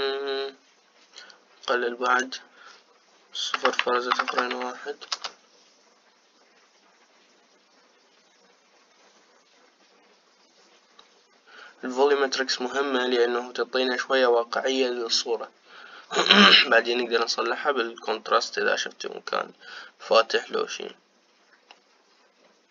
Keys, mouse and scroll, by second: 2.8-5.2 drag, 5.2 KP_0.